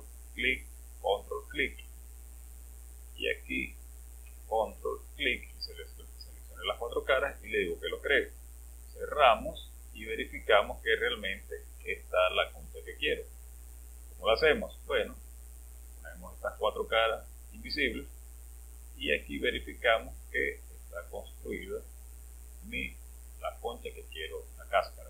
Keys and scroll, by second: 17.8 space.